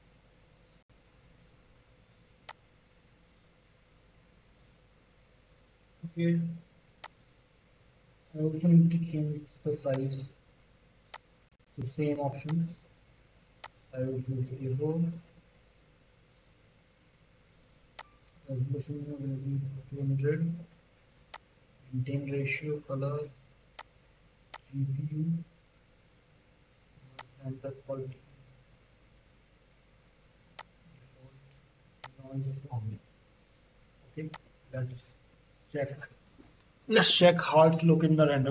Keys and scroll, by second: 19.5 KP_2, 19.6 KP_0.